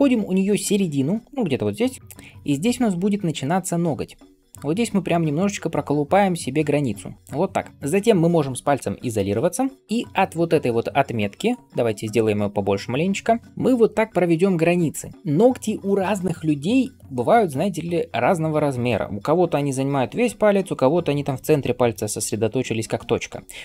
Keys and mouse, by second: 2.6 [, 3.0 [, 3.1 [, 3.2 [, 9.0 KP_Divide.